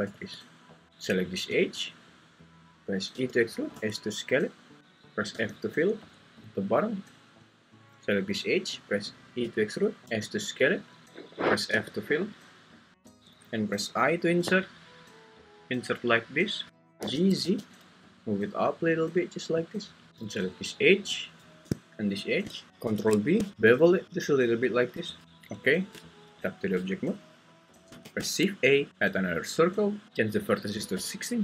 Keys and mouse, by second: 0.1 `, 3.1 e, 3.7 s, 5.3 f, 7.1 alt+click, 9.4-11.7 typing, 11.0 Escape, 13.9 i, 16.4 click, 17.0 g, 17.5 z, 22.8 ctrl+b, 25.2 `, 25.9 Tab, 28.0 shift+a, 30.0-31.4 drag.